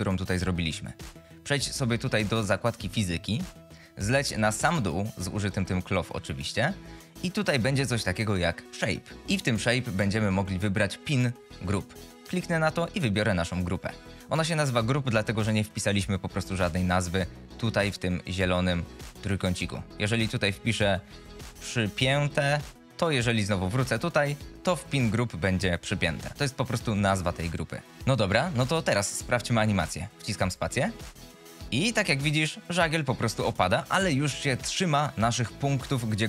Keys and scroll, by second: 30.5 space.